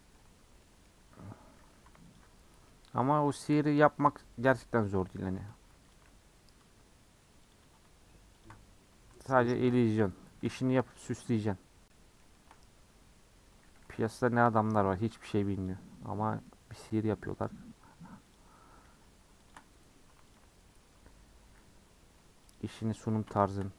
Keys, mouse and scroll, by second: 0.0 middle drag, 0.2 Tab, 0.4 scroll up 2, 0.6 middle click, 1.5 2, 2.6-5.9 middle drag, 5.9 alt+click, 7.5 click, 9.5 ctrl+click, 10.3 a, 11.1 u, 11.9 middle click, 12.5 scroll up 2, 14.2 alt+click, 15.0 a, 15.7 u, 16.4-18.3 middle drag, 18.3 click, 19.5 shift+click, 20.3 alt+click, 22.5 alt+click, 23.5 shift+click.